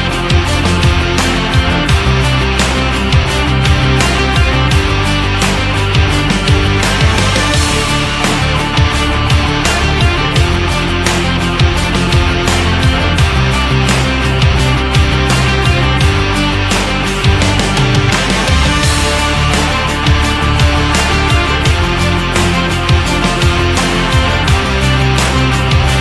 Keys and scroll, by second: 7.7 ctrl+d, 8.5 ctrl+d, 9.3 ctrl+d, 10.1 ctrl+d, 12.2 ctrl+d, 12.7 ctrl+d.